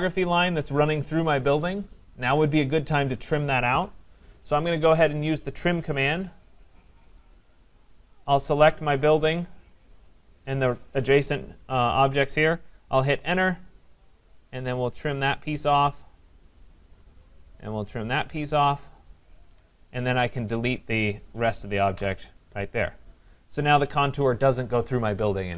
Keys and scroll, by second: 4.5 Escape, 13.0 Return, 19.4 Escape, 21.9 Delete.